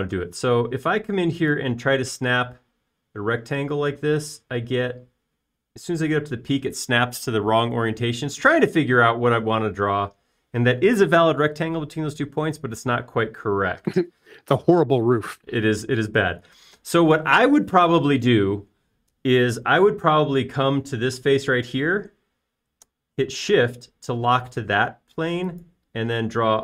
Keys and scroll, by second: 1.6 r, 2.2 r, 15.8 Escape.